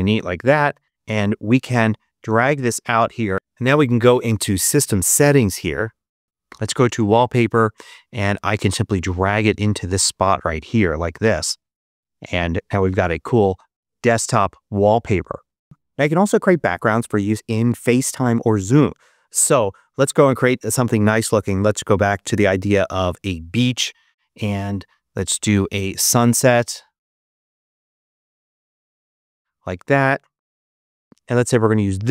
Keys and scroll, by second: 21.4-22.8 typing, 23.0 Return, 27.3-28.9 typing, 28.9 Return.